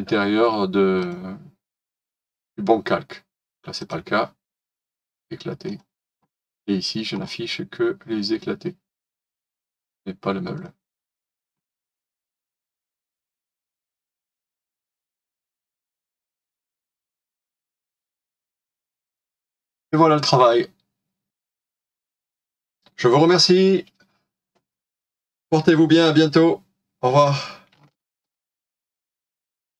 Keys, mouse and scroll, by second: 7.1-10.2 scroll down 1, 15.4 right click, 20.5 scroll up 1, 21.3-21.6 scroll down 1, 21.6 right click.